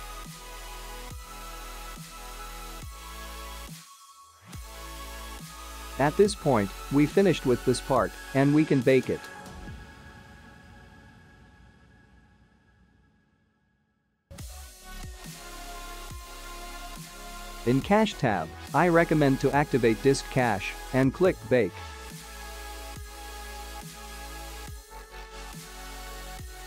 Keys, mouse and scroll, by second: 3.4 space, 4.9 click, 6.0 click, 7.1-9.2 scroll down 16, 9.9 click, 10.7-11.4 scroll down 2, 11.4 click, 11.7-12.8 scroll down 7, 15.3 click, 15.6 click, 19.4 click, 20.5-22.4 scroll down 4, 22.6 ctrl+s, 25.3 click.